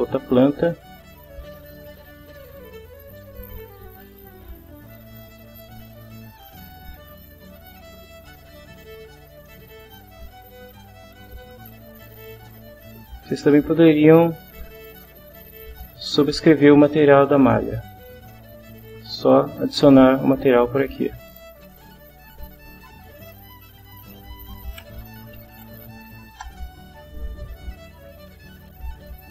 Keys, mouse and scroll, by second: 0.4 click, 1.7 click, 2.4 click, 3.6 click, 5.1-6.1 drag, 6.4 click, 7.8 click, 9.0 click, 10.7-11.5 drag, 12.0 click, 20.1 click, 21.6 click, 23.6 click, 24.5-26.1 typing, 26.3 Return, 28.2 click.